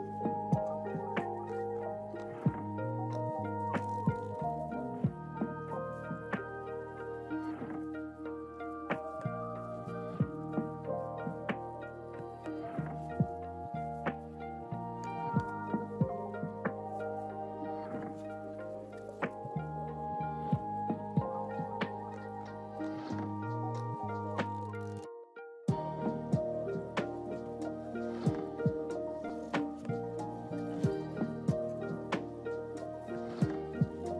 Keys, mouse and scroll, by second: 3.2 click, 7.3 click, 9.7 click, 11.6 click, 21.1 click, 22.3 click, 25.1 click, 28.5-30.2 drag.